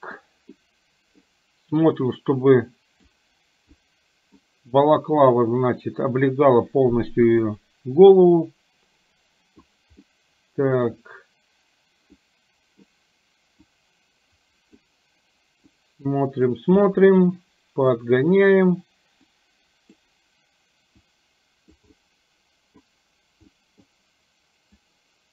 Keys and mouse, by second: 0.6 middle click, 2.0-3.2 drag, 3.9 middle click, 5.4-7.4 drag, 7.5-9.6 middle drag, 10.0 middle click, 12.1 middle click, 13.7-14.9 drag, 15.7-16.7 drag, 16.9-18.0 middle drag, 19.4 click, 21.1 click, 21.9 middle click, 23.5 middle click, 24.7-25.3 drag.